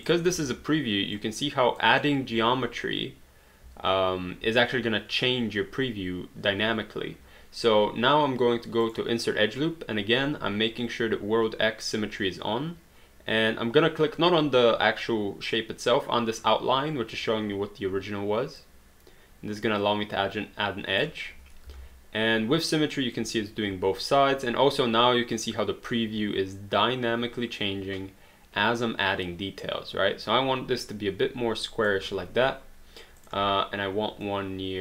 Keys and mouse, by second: 0.5 w, 1.1 click, 8.9 click, 18.6 click, 21.8 w, 23.2 click, 33.2 click.